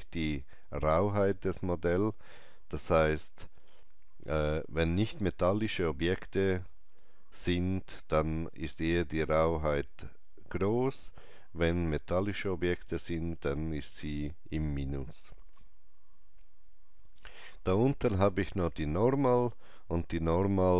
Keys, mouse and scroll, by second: 17.5 scroll down 1.